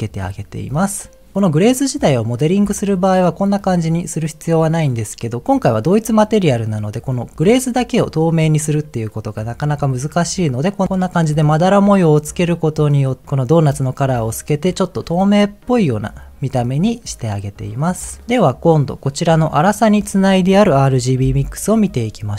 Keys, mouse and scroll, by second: 19.4 click, 20.3 click, 21.1 m.